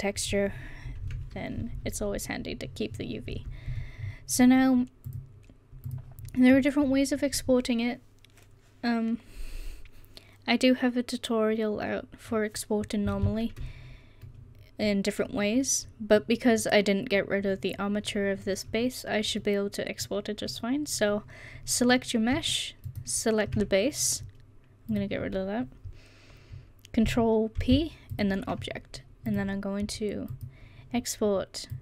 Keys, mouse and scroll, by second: 3.4 Tab, 27.6 ctrl+p.